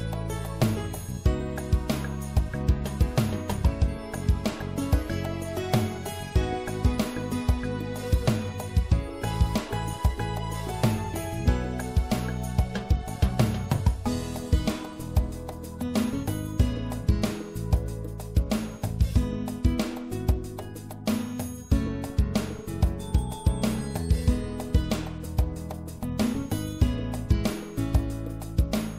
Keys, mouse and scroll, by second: 0.4-4.4 drag, 4.4-5.6 middle drag, 5.6 i, 7.9 middle click, 11.0 s, 12.1-14.5 middle drag, 15.9-19.6 middle drag, 16.9 e, 19.6 click, 22.0 s, 28.2 middle click.